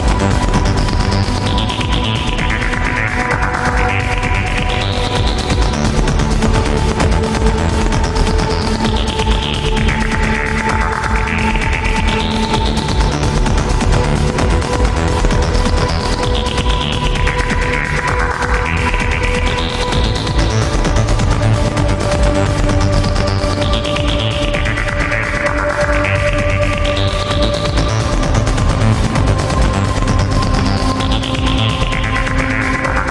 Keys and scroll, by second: 5.0 ctrl+z, 5.7 ctrl+z, 6.6 ctrl+z, 14.7 alt+space, 15.1 alt+space, 17.6 ctrl+z, 19.1 alt+space, 19.6 alt+space, 20.1 alt+space, 20.9 alt+space, 21.6 alt+space, 22.6 alt+space, 24.0 alt+space, 24.9 alt+space, 25.7 alt+space, 26.7 alt+space, 28.4 alt+space, 31.2 alt+space, 32.7 alt+space.